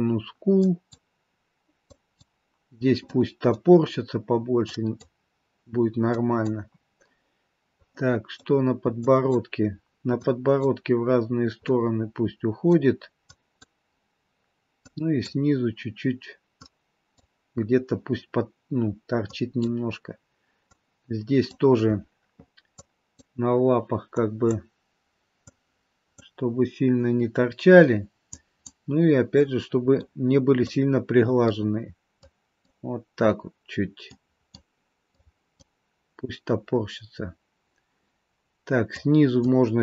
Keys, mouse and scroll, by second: 0.7 click, 2.1 click, 3.0 middle click, 4.8 click, 6.2 click, 7.8 middle click, 9.1 click, 10.4 click, 11.6 middle click, 13.5 click, 15.0 click, 16.8 click, 19.4 click, 20.8 click, 22.9 click, 24.3 click, 25.7 click, 28.4 click, 29.4 middle click, 30.8 click, 32.4 click, 34.3 click, 35.3 click, 36.6 scroll down 2, 39.1 click.